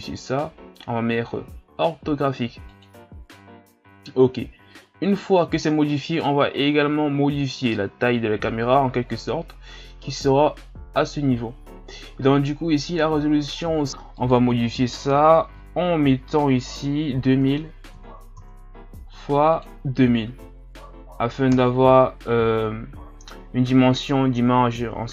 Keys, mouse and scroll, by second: 11.0 click, 14.1-17.3 drag, 17.5 KP_0, 19.5-20.5 drag, 20.5 KP_0.